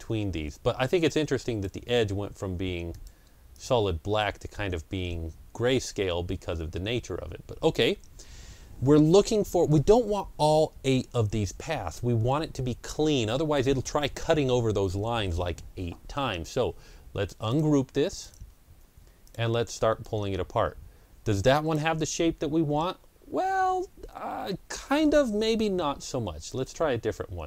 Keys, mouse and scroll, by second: 5.8-6.2 scroll up 2, 6.1 click, 6.7 ctrl+scroll down 1, 17.4 click, 17.4 ctrl+scroll down 1, 18.1 click, 19.1-24.1 drag, 25.9 Delete, 25.9-27.4 drag.